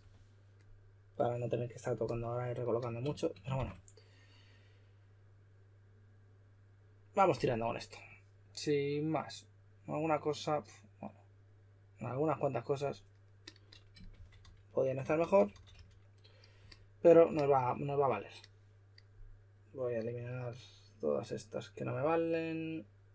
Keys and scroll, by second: 0.0-0.3 typing, 3.5 shift+r, 13.9-16.2 typing.